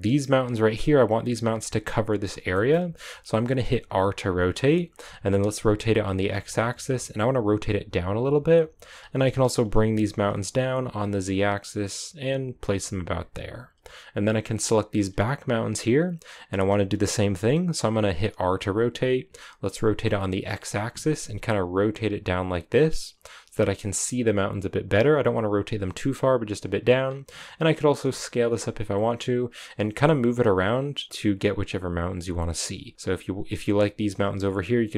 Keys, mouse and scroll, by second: 0.0 right click, 2.4-3.7 shift+middle drag, 3.7 r, 9.6 g, 14.6-17.1 right drag, 17.1 r, 26.9 s, 27.6 g, 28.1 s, 28.4 g, 33.4 g, 34.1 g.